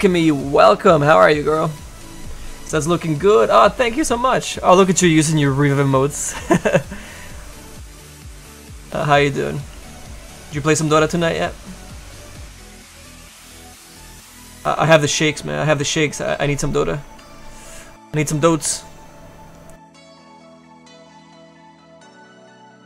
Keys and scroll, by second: 9.7 s, 22.3 s.